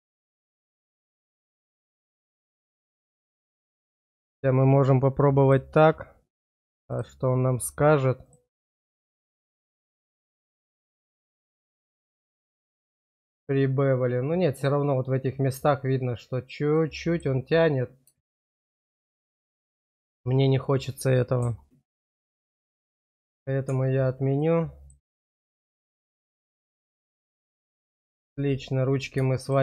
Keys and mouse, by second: 1.5 shift+middle click, 1.8 middle click, 2.6 middle click, 6.8 click, 8.3 click, 9.3 middle click, 10.1 shift+middle click, 11.2 shift+middle click, 12.7 middle click, 16.7 middle click, 18.2 shift+middle click, 18.9 middle click, 19.8 shift+middle click, 22.5 shift+middle click, 24.4 middle click, 25.5 shift+middle click, 26.5 middle click, 29.3 shift+middle click.